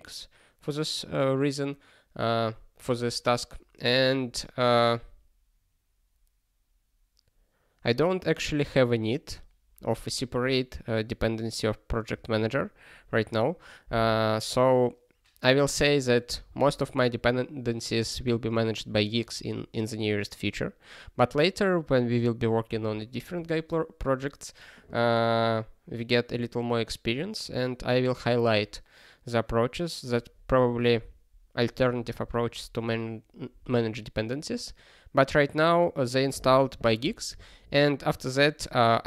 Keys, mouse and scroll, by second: 16.4 ctrl+p.